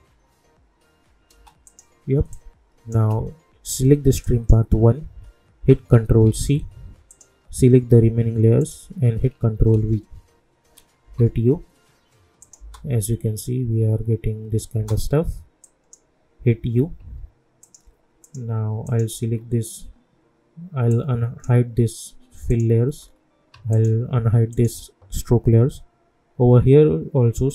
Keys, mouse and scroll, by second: 1.3 space, 1.6-4.2 drag, 6.2 ctrl+c, 7.1 click, 7.4 scroll up 1, 8.6 shift+click, 9.7 ctrl+v, 11.0 u, 12.4 click, 12.6 space, 14.7 space, 15.6 click, 16.5 u, 17.6 click, 19.3 scroll up 1, 19.9-20.9 scroll down 1, 20.9-22.5 drag, 23.0 scroll up 1, 23.7 shift+click.